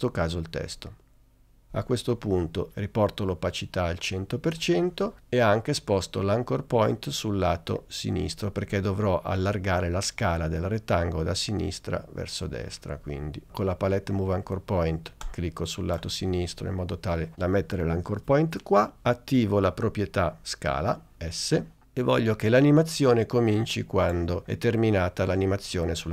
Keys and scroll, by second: 21.5 s.